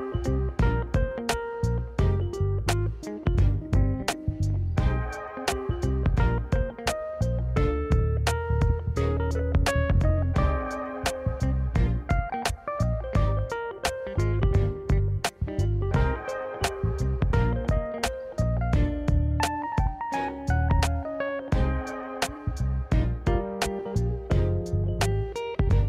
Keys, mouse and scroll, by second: 0.1-3.0 drag, 3.4-4.9 drag, 5.6-6.1 scroll up 3, 6.0 click, 7.3 click, 7.6 click, 7.9-9.4 drag, 10.6 Tab, 11.8 click, 12.9 Tab, 13.2 Tab, 14.1 click, 14.7 click, 15.1 Tab, 15.9-16.4 drag, 16.8 Tab, 17.1 scroll up 3, 17.8-18.2 shift+middle drag, 18.8 1, 19.7 click, 21.0 shift+g, 23.4 x, 25.1 click.